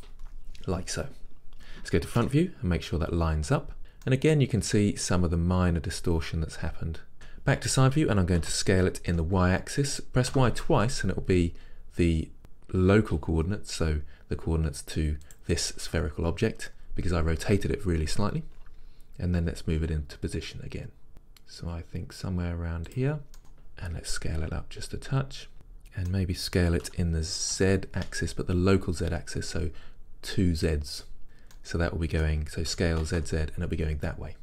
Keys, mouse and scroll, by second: 3.8 scroll, 4.1-7.1 middle drag, 7.3 KP_3, 8.6 s, 15.3-19.5 drag, 19.5 g, 23.0 click, 23.4-24.5 middle drag, 24.5 s, 25.5-27.0 middle drag, 27.0 s, 31.3 click, 31.6-32.9 middle drag, 32.9 s.